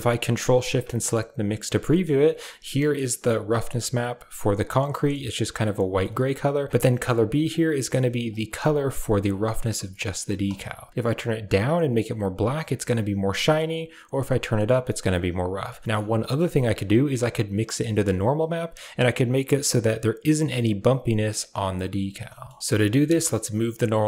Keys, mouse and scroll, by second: 0.7 ctrl+shift+click, 1.6 middle click, 1.8 shift+middle click, 2.0 middle drag, 2.6 middle drag, 4.8 middle drag, 9.7 middle click, 10.6 ctrl+shift+drag, 13.5 drag, 16.0 middle drag, 16.7 drag, 22.2 shift+middle click, 23.1 click.